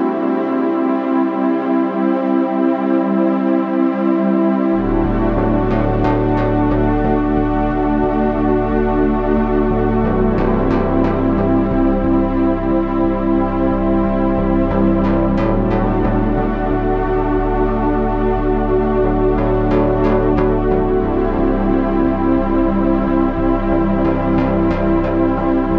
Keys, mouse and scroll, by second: 6.6 c, 8.0 c, 11.7 c, 12.7 right click, 14.2 right click, 14.7 z, 16.9 g, 18.5 Tab, 24.9 Tab.